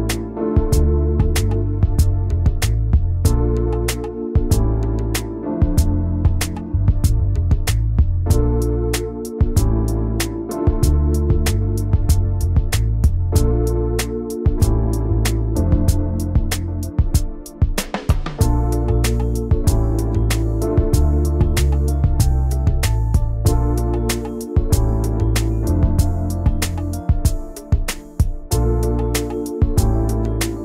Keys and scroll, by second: 0.8 v, 4.8 ctrl+g, 9.6 v, 20.2-24.3 typing, 22.7 Return, 24.4 ctrl+g, 28.1 ctrl+c, 28.5 ctrl+shift+v.